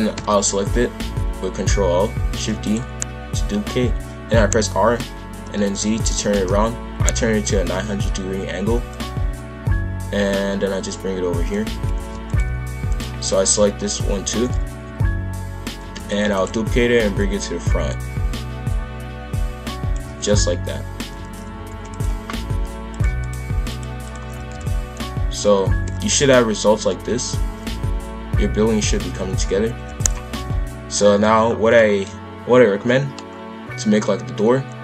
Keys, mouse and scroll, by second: 0.1 ctrl+l, 2.3 shift+d, 4.2 r, 8.9 click, 11.7 shift+f, 12.9 shift+click, 13.7 ctrl+l, 14.2 shift+f, 16.2 shift+d, 17.2 click, 20.0 shift+f, 22.9 click, 23.2 click, 23.7 click, 24.4 shift+f, 30.2 KP_5, 30.3 KP_1, 30.9 shift+middle drag, 31.2-31.7 shift+scroll up 3, 31.7-33.9 shift+middle drag, 33.9-34.8 drag.